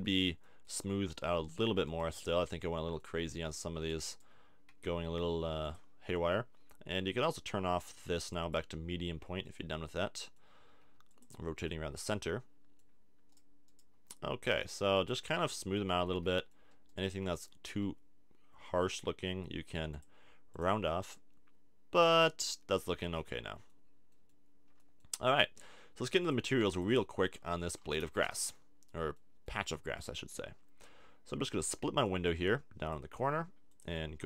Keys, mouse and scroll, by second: 0.0-1.3 middle drag, 1.3 Tab, 1.9-5.7 drag, 2.0 Tab, 4.7 g, 9.4 middle click, 10.8 g, 11.2-12.8 middle drag, 13.5-15.1 drag, 13.9 g, 17.7-19.0 drag, 17.7 f, 19.9 click, 20.7-21.7 drag, 21.7-23.6 middle drag, 26.2 click, 26.6 click, 27.2-30.3 middle drag, 28.0 a, 28.2 Tab, 32.0 click, 33.7-34.2 drag.